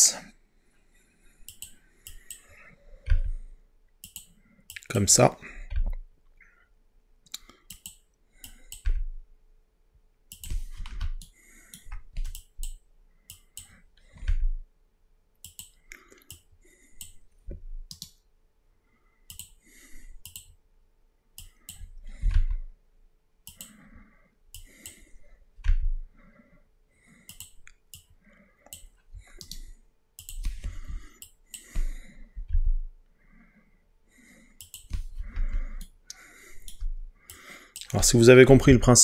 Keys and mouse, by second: 1.5 click, 3.1 g, 4.1 click, 5.8 g, 7.8 click, 8.9 g, 10.4 click, 14.3 g, 15.5 click, 18.0-19.5 right drag, 20.3 click, 22.4 g, 23.5 click, 24.6 click, 25.7 g, 27.3 click, 28.0 click, 29.5 right click, 31.3 click, 32.6 g, 34.7 click, 35.9 shift+middle click, 38.7 g.